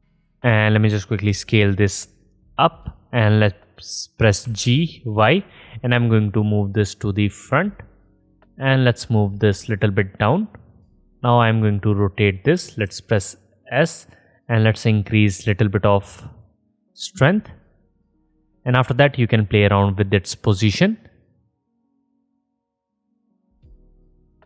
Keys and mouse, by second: 1.5 s, 4.6 g, 9.9-12.5 middle drag, 11.1 ctrl+z, 13.1 s, 14.2-15.6 drag, 24.3-24.4 middle drag.